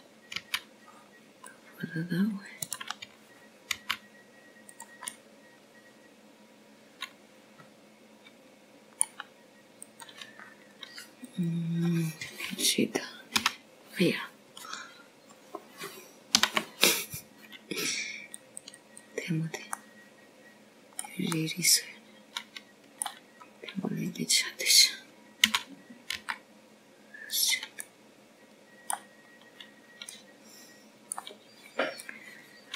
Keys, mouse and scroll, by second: 1.8 middle click, 3.2 c, 5.5 right click, 6.7 g, 7.9 middle click, 12.7 click, 13.4-14.1 scroll up 1, 14.1 click, 14.1-14.7 scroll up 1, 16.2 ctrl+e, 19.2 ctrl+r, 22.5 scroll up 1, 22.7 middle click, 24.3 middle click, 26.3-26.6 scroll up 2, 28.3 s, 30.7 middle click, 32.1 scroll up 1.